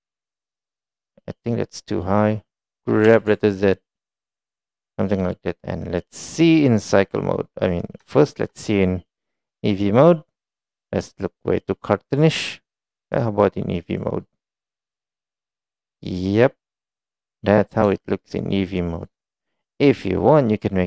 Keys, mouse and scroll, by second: 1.5-2.3 drag, 8.2 shift+middle drag, 9.6-12.3 middle drag, 13.1 click, 13.9-14.8 drag, 15.7 click, 16.5 middle drag, 17.6-18.1 middle drag, 18.5 shift+middle click, 19.9 click.